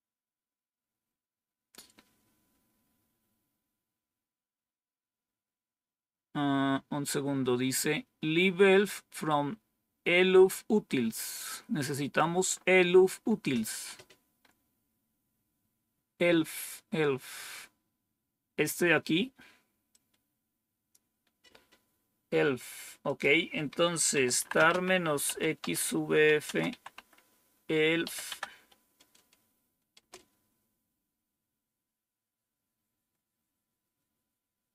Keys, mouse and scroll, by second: 11.8-12.4 scroll up 2, 12.4-13.2 scroll up 1, 13.2-13.8 scroll up 1, 13.8-15.2 scroll up 1, 15.2-19.9 scroll up 1, 19.9-20.9 drag, 23.0 click, 23.8-28.0 typing, 29.9 typing.